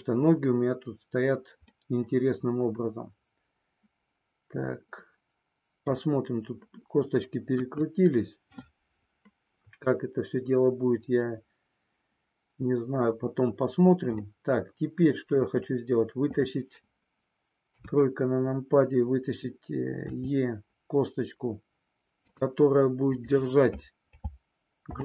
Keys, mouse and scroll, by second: 1.6-6.0 middle drag, 7.5 KP_1, 14.2 shift+scroll up 1, 14.3-15.4 shift+middle drag, 15.4 shift+scroll down 1, 17.6 KP_3, 20.0 e, 23.2 click, 24.8 alt+p.